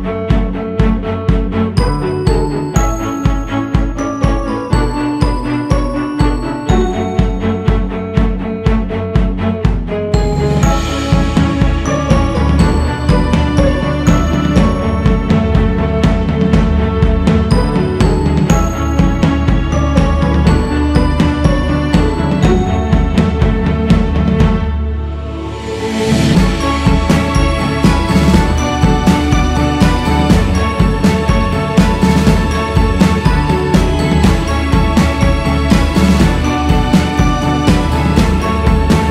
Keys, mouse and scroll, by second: 0.3-2.3 drag, 2.3-2.8 scroll down 1, 2.8-4.2 drag, 4.2-5.3 scroll down 5, 5.3-6.8 scroll up 4, 6.8-7.9 drag, 7.9-8.2 scroll up 1, 8.2-13.1 drag, 13.1 shift+c, 13.4 f, 15.5-22.2 drag, 22.2-24.1 scroll down 10, 24.1 scroll up 2, 25.3-26.8 drag, 26.8-27.6 scroll up 2, 27.6-28.5 scroll up 2, 28.5 f, 30.2 g, 30.5-31.3 scroll up 2, 31.3-35.8 drag, 35.8 c, 36.3 f, 38.3-39.1 scroll up 2.